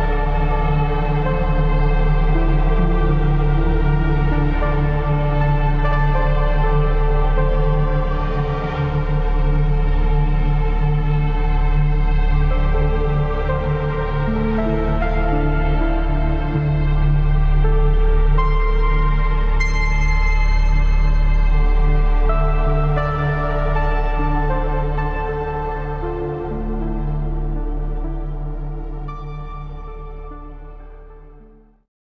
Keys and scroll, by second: 1.1 Delete, 7.3 ctrl+KP_Subtract, 10.5-12.3 typing, 12.2 ctrl+KP_Add, 13.7 Return, 13.8 ctrl+KP_Subtract.